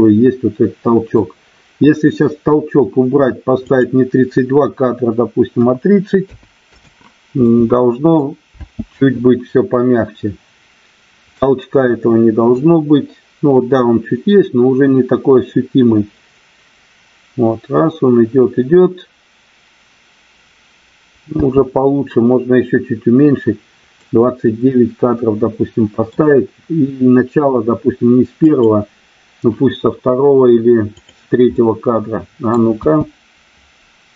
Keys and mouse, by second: 3.7-6.9 drag, 7.4-8.1 middle drag, 8.5 space, 11.5-12.9 middle drag, 21.5 space, 23.9-26.0 middle drag, 30.9 drag, 31.4-32.4 middle drag, 32.6 space.